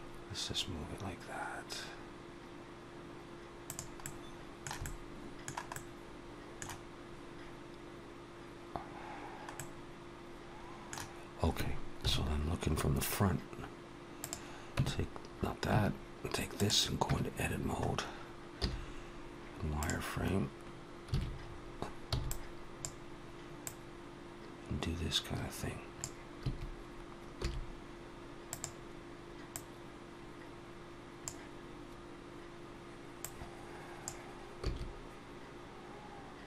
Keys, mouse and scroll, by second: 3.9 middle click, 4.6 middle click, 5.6 middle click, 9.4 middle click, 11.9 KP_1, 14.0 click, 14.6 Tab, 15.6 Tab, 16.3 click, 16.9 Tab, 18.4 z, 21.0 alt+a, 21.3-21.9 scroll up 3, 21.9 b, 23.5 click, 26.3 a, 27.2 s, 29.4 click, 34.5 click, 34.5 s.